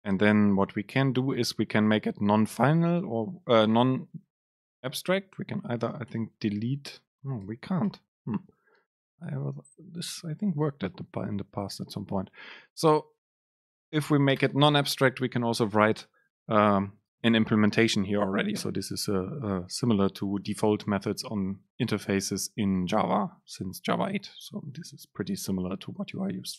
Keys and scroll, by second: 4.2 super+Left, 5.3 Right, 6.2 BackSpace, 7.9 BackSpace, 8.0 super+z, 9.1 End, 9.2 Left, 15.0 Down.